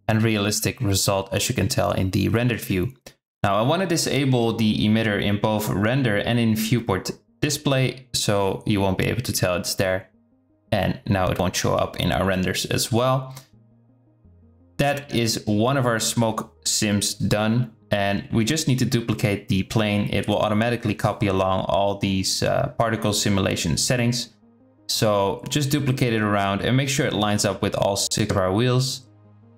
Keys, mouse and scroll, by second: 3.9 click, 6.7 click, 7.9 click, 10.7 z, 12.1 click, 16.5 shift+d, 19.3 shift+click, 20.0-20.5 shift+drag, 20.6 shift+d, 24.6 shift+d, 28.2 click, 28.7 g, 28.9 s.